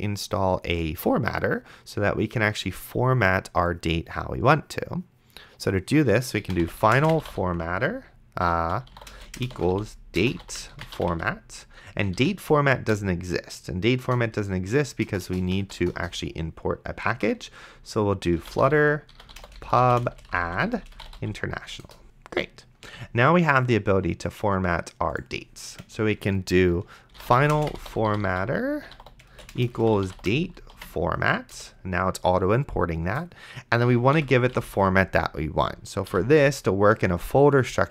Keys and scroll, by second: 6.3-12.9 typing, 17.4 ctrl+`, 18.1-21.7 typing, 21.8 Return, 27.1-31.0 typing, 31.5 Return, 33.8 End, 34.2 ;, 34.5 BackSpace, 36.1 shift+;.